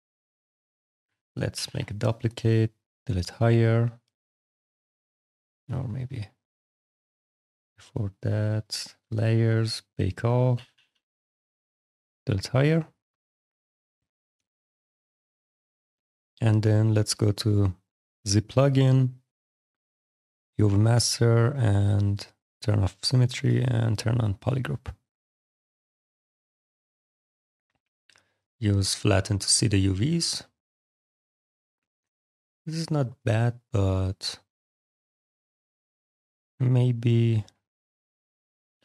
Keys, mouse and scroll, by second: 1.4 ctrl+shift+d, 2.8 click, 3.8 click, 5.5 click, 8.5 click, 9.4 click, 10.2 click, 10.4 shift+d, 11.6 click, 12.8 click, 14.0 click, 15.2 click, 19.9 click, 22.0 click, 23.3 click, 25.0 click, 27.7 click, 29.4 f, 29.9 alt+click, 30.7 alt+click, 34.1 click, 35.1 click, 36.6 ctrl+shift+click, 37.5 click, 38.6 ctrl+w.